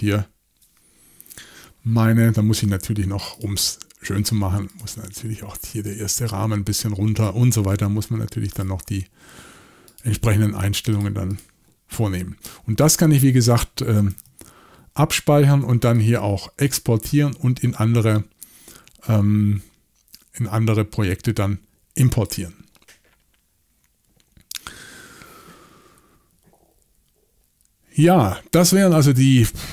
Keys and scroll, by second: 14.1 typing.